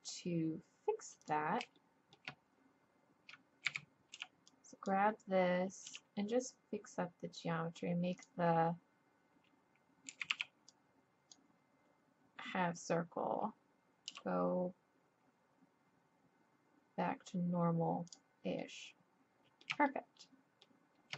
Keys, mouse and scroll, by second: 1.2-3.2 drag, 3.2 middle click, 3.6 a, 4.1 b, 5.9 g, 10.1 a, 10.3 b, 14.1 g, 18.6-21.1 middle drag.